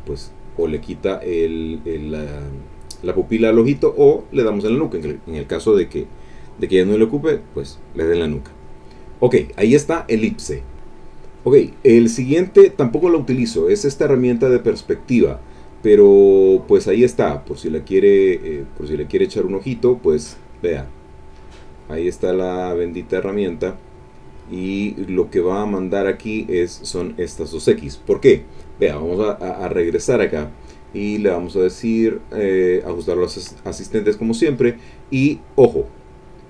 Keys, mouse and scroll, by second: 0.7 click, 4.0 click, 9.2 middle click, 13.9 click, 14.6 click, 16.0 click, 19.1 click, 20.4 click, 25.4 click, 28.9 click, 31.3 click, 32.0 click, 34.2 click.